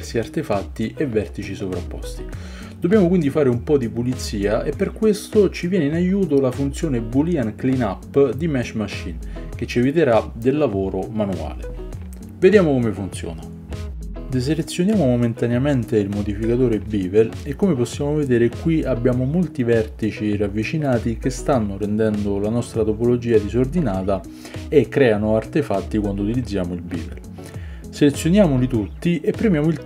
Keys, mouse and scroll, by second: 0.3-8.4 drag, 0.3-8.4 middle drag, 0.3-8.4 right drag, 8.2 Tab, 8.5-10.4 shift+drag, 8.5-10.4 shift+middle drag, 8.5-10.4 shift+right drag, 8.6 shift+z, 11.2 click, 11.2 middle click, 11.2 right click, 11.7 shift+z, 12.2 click, 12.2 middle click, 12.2 right click, 13.0 shift+click, 13.0 shift+middle click, 13.0-29.8 shift+right drag, 17.4-18.9 drag, 17.4-18.9 middle drag, 18.9 Tab, 21.8 shift+middle click, 23.5 Tab, 26.4 click, 28.2 ctrl+click, 28.2 ctrl+middle click, 29.2 ctrl+click.